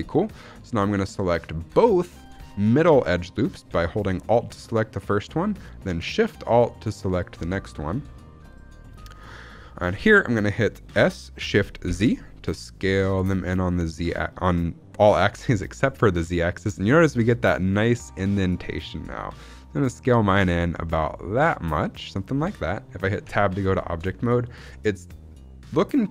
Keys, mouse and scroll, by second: 0.9 alt+click, 1.8 alt+shift+click, 3.9 alt+click, 6.7 alt+shift+click, 7.5-8.1 scroll down 2, 8.1 shift+middle click, 8.4-9.0 scroll up 3, 9.0 shift+middle click, 10.8 s, 11.8 shift+z, 22.0 click, 22.2-23.2 scroll down 3, 23.2 Tab, 23.6 shift+middle click, 23.6 shift+scroll down 1, 23.9-25.6 scroll up 1.